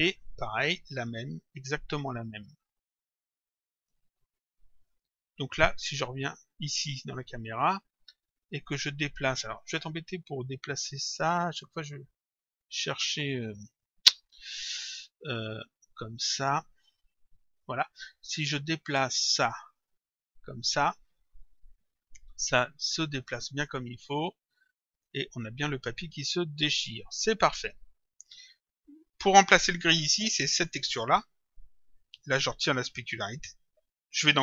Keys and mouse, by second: 1.2 click, 3.8 click, 5.0 click, 6.7 click, 8.4 click, 10.2 middle click, 13.6 middle click, 17.2 middle click, 19.6 click, 21.4 middle click, 23.7 click, 25.8 click, 27.6 middle click, 30.6 click, 33.2 click.